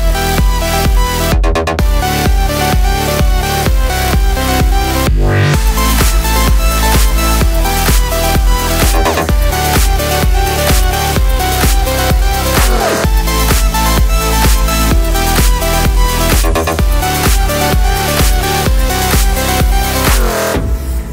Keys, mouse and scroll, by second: 0.1-2.3 drag, 0.9 Return, 3.4-4.4 drag, 3.8 KP_Enter, 4.4 Tab, 4.6-6.2 middle drag, 5.7-6.7 scroll down 4, 6.3 KP_Divide, 6.3-7.9 middle drag, 7.9 click, 8.1 Tab, 8.4 click, 8.8 ctrl+KP_Add, 9.3 click, 9.6 click, 9.7 Tab, 9.9-11.4 middle drag, 10.9 KP_0, 11.4 ctrl+s, 11.9 click, 12.4 click, 12.7 click, 13.7 click, 15.5 click, 17.2-18.5 middle drag, 18.5 click, 18.7 click, 19.5 click, 20.0 click, 20.5 KP_Enter.